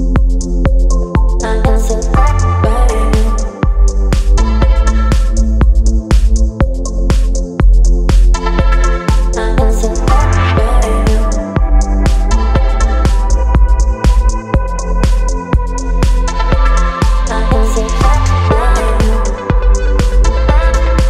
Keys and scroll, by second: 13.7 ctrl+b.